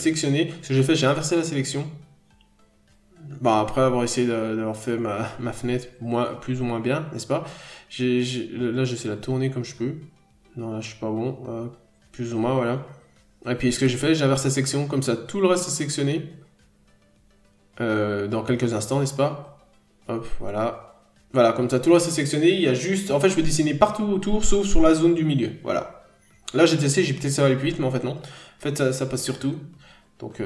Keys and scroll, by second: 0.5 n, 1.4-1.8 scroll up 1, 9.7-10.0 scroll down 1, 11.9-12.3 scroll down 1, 14.8-15.2 scroll up 1, 15.5 ctrl+z, 16.7-17.1 scroll down 1, 17.4-17.7 scroll up 1, 23.2 p, 26.0 ctrl+z, 26.7 scroll up 1, 26.9 n, 27.2 b.